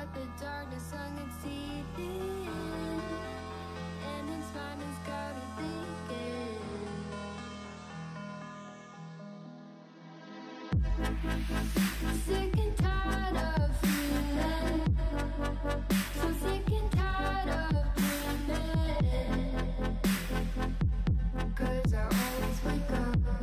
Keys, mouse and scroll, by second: 0.5 KP_3, 0.7 alt+z, 0.9 shift+middle click, 1.1 scroll up 4, 1.2 Tab, 1.5 shift+middle click, 1.8 g, 3.0 shift+middle click, 3.2-3.7 scroll up 3, 3.7 g, 5.3 shift+middle click, 5.5 scroll up 1, 5.7 shift+middle click, 6.2 s, 9.2 KP_1, 9.5 shift+middle click, 10.1 s, 11.0-11.4 scroll down 4, 11.4 alt+z, 11.6 middle drag, 11.9 scroll down 1, 12.0 middle click, 12.8 KP_3, 13.2 alt+z, 13.5 click, 13.9 scroll up 1, 14.1 g, 15.3-15.7 scroll up 4, 15.7 ctrl+l, 16.0 scroll up 3, 16.3 s, 17.7 scroll down 1, 17.8 click, 17.8 middle click, 18.4 alt+z, 18.8 s, 19.7 scroll down 1, 19.9 shift+middle click, 20.7 g, 21.5 KP_1, 21.8 shift+middle click, 22.1 g.